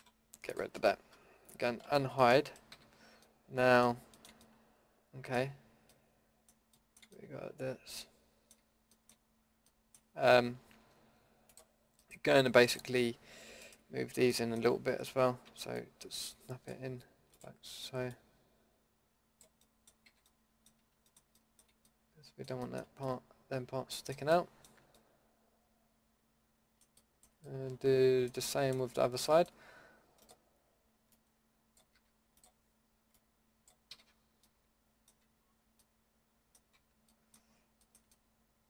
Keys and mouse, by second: 0.0 Delete, 1.8 alt+h, 2.7 a, 9.3-13.6 middle drag, 13.7-14.5 middle drag, 15.4 shift+Tab, 20.1 a, 22.4-22.7 middle drag, 23.2-24.5 middle drag, 25.1-26.5 middle drag, 28.9-29.4 middle drag, 29.6-31.1 middle drag, 31.1-34.9 drag, 31.9 a, 33.9 a, 35.2 Tab, 36.7 Tab.